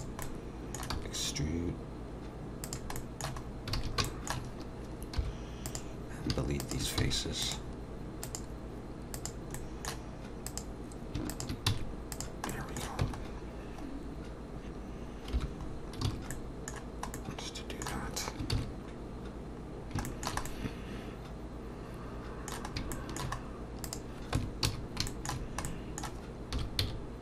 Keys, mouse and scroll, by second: 0.2 middle click, 1.0 e, 3.0 middle click, 3.4-3.8 scroll up 2, 3.8 alt+a, 4.1 shift+middle click, 4.5-5.2 scroll up 2, 5.2 3, 5.7 click, 6.6 shift+click, 7.0 x, 8.2 click, 9.2 click, 9.6 middle click, 10.5 click, 11.3 shift+click, 11.4 shift+click, 11.7 x, 12.5 middle click, 13.0 Tab, 13.2-14.3 scroll down 3, 15.3 /, 15.7-16.0 scroll down 1, 16.1 alt+a, 19.3 ctrl+s, 19.7 scroll down 2, 20.1 shift+middle click, 20.5 middle click, 22.7 scroll up 1, 23.0 shift+middle click, 23.4-23.7 scroll up 2, 23.8 click, 24.4 Tab, 24.7 a, 25.1 shift+middle click, 25.7 middle click, 26.5 s.